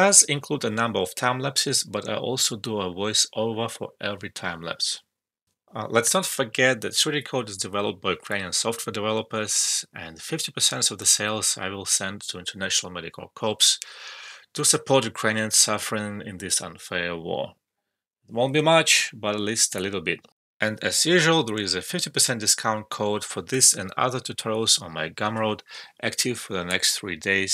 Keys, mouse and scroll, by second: 0.0 alt+right click, 0.1 alt+middle click, 0.2 alt+click, 1.0 alt+middle click, 1.1-1.7 alt+drag, 2.5 alt+right click, 2.6 alt+click, 2.9 alt+middle click.